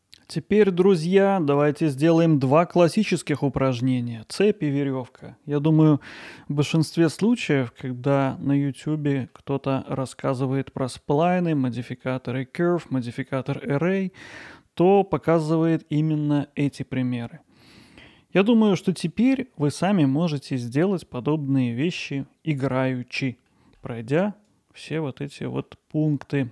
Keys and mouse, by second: 0.3-0.9 middle drag, 6.7-7.3 middle drag, 7.7-8.1 middle drag, 8.6 middle click, 11.5 middle click, 14.3-14.9 middle drag, 19.2 click, 23.5 middle click, 24.5 click, 25.6-26.5 middle drag.